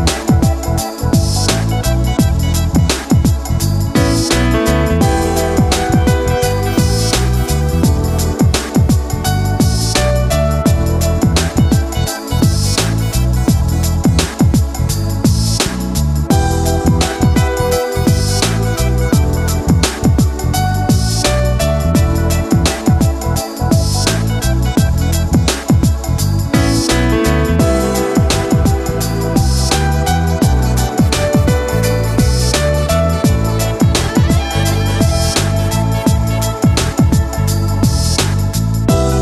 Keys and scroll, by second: 7.5 ctrl+z, 38.2 ctrl+z.